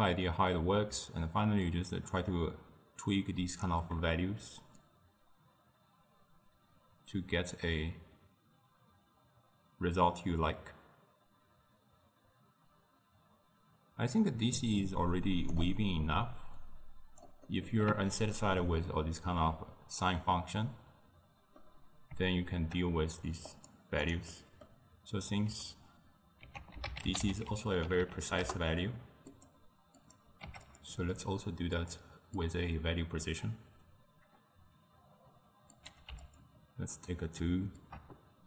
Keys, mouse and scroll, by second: 1.7-8.1 shift+drag, 16.7 click, 17.5-21.8 middle drag, 23.5 click, 24.3-26.5 middle drag, 26.5 ctrl+a, 30.0 click, 31.8-35.4 drag, 35.8 click, 37.9-38.4 shift+drag.